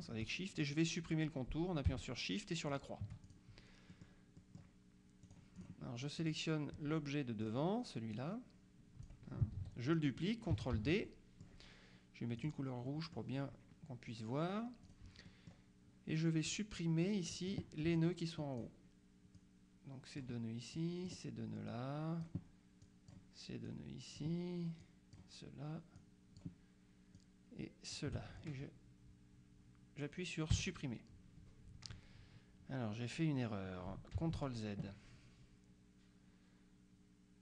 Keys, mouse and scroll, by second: 2.8 shift+click, 4.0 middle click, 5.3 click, 6.3 click, 7.5 click, 8.2 click, 9.6 ctrl+z, 10.8 ctrl+d, 11.1 ctrl+middle click, 12.5 click, 12.9 middle click, 14.9 click, 15.3 middle click, 17.1 click, 19.4-20.8 drag, 21.8-22.8 drag, 22.9 click, 23.7 click, 24.9 click, 26.0 click, 27.3 click, 30.6 Delete, 34.3 ctrl+z.